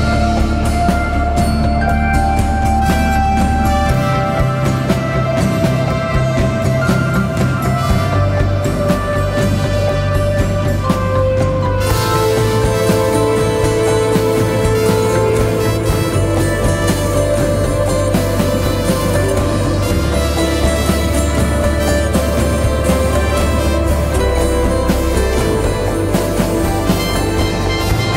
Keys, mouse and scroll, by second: 1.1 alt+click, 3.0 ctrl+t, 4.1 alt+shift+click, 14.1 alt+shift+click, 23.7 alt+shift+click, 25.6 Return.